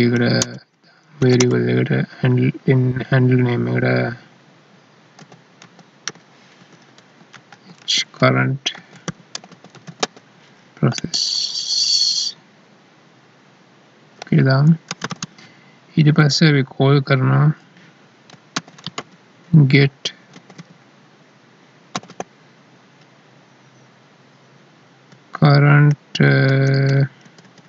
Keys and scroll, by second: 7.3 ctrl+Left, 7.7 Right, 10.9 ctrl+Right, 14.8 space, 25.1 Down.